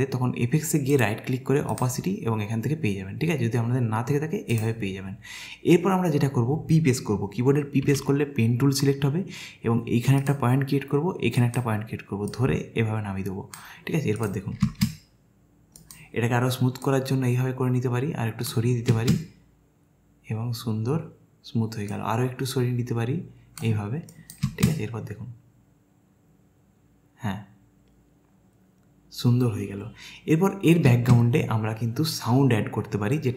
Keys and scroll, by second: 7.9 p, 14.7 space, 18.9 space, 24.5 space, 30.9 space.